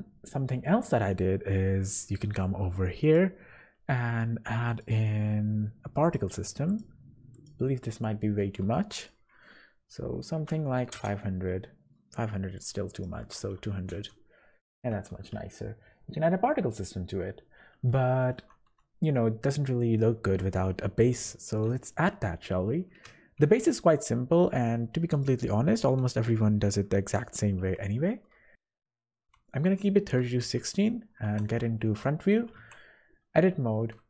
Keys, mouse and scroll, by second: 2.0 click, 3.0 click, 6.0 click, 6.7 click, 10.6 KP_0, 12.5 click, 12.9 click, 13.6 KP_0, 15.5-15.9 scroll down 4, 16.8-17.5 scroll down 4, 17.2-18.3 scroll up 6, 17.9 shift+middle click, 18.7-19.0 scroll down 2, 20.2 g, 22.4 scroll up 1, 23.1 scroll up 2, 23.4 shift+a, 25.6 g, 28.9 g, 29.3 Escape, 30.4 KP_1, 31.3-31.8 scroll up 3, 31.7 shift+middle click, 32.6 Tab, 33.3 z.